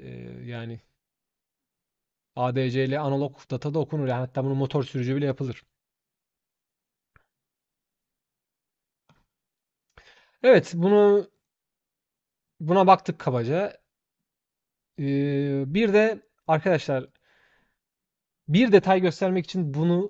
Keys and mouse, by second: 8.8 shift+click, 19.7 shift+click.